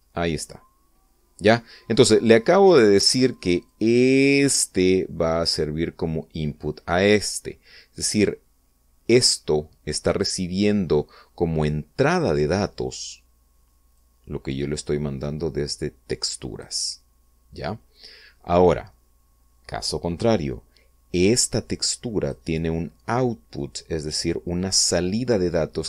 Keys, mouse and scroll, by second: 0.5-1.1 scroll up 1, 4.3-5.7 drag, 14.6-17.5 drag, 21.9-23.1 drag.